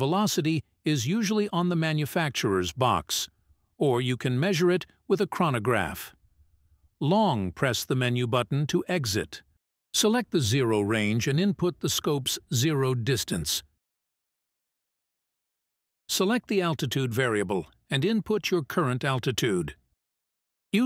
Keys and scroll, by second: 3.5 Menu, 6.1 Menu, 11.5 Menu, 14.5 Menu, 18.2 Menu.